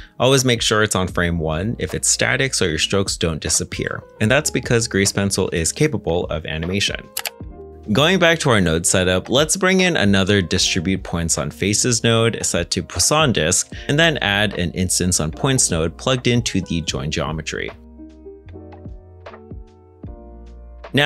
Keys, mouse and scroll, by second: 0.7 ctrl+z, 1.2 ctrl+Tab, 4.3 g, 5.6 middle click, 7.1 ctrl+z, 19.1-19.5 scroll down 1, 19.5 shift+middle click.